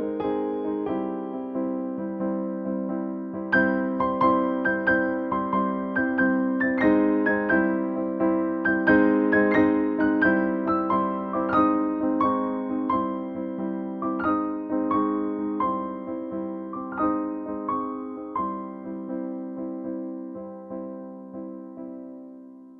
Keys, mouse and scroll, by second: 1.4 click, 5.8-16.8 drag, 16.8 click, 18.6 click, 19.3 Down.